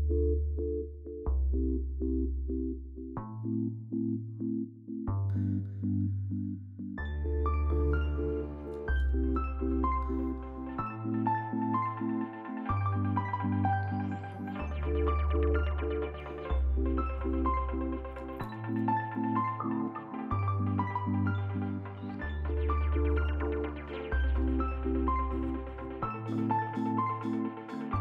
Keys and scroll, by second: 0.5 c, 1.8 q, 2.4 s, 3.0 a, 4.2 s, 5.4 Delete, 10.3 a, 10.7 s, 11.3 t, 12.3 F3, 13.0 F3, 20.0 a, 27.3 ctrl+z, 27.7 t.